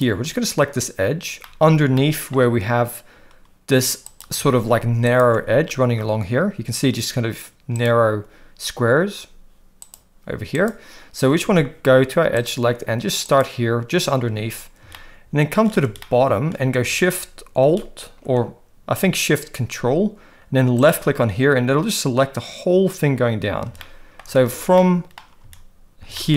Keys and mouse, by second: 1.4 middle click, 1.9 shift+middle click, 4.1 click, 4.3 alt+a, 5.1 alt+shift+click, 7.8 click, 9.8 click, 10.6 click, 11.4 alt+a, 13.3 click, 14.9 shift+middle click, 16.0 shift+middle click, 23.9 shift+middle click, 24.8 shift+middle click, 26.2 shift+middle click.